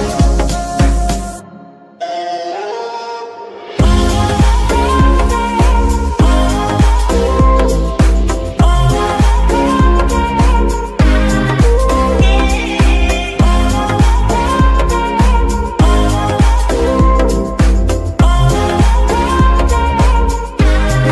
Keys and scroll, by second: 0.0 g, 0.8 Escape, 1.3 shift+Escape, 4.9 z, 7.5 KP_Decimal, 16.2-21.1 typing.